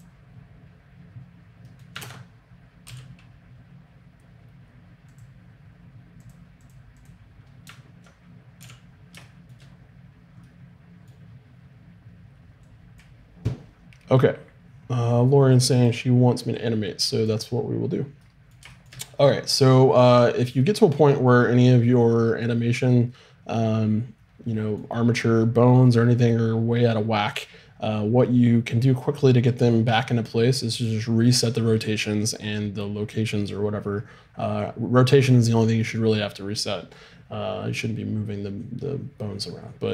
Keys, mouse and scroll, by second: 0.0-1.7 right drag, 0.0 t, 2.0 ctrl+space, 2.8 n, 5.2 click, 6.4-8.9 drag, 8.6 n, 10.3-12.7 middle drag, 12.7-15.1 right drag, 16.5-18.5 right drag, 18.5-24.0 middle drag, 36.9-39.9 scroll up 1.